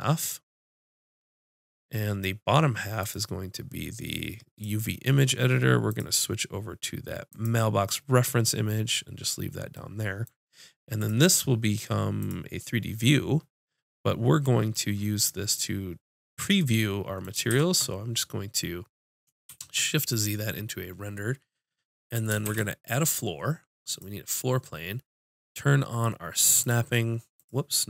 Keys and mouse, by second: 5.9-7.8 drag, 8.0-10.9 middle drag, 11.0-12.7 drag, 15.1-17.5 middle drag, 17.5 shift+z, 19.5 shift+c, 22.5 shift+a, 26.6-27.8 drag.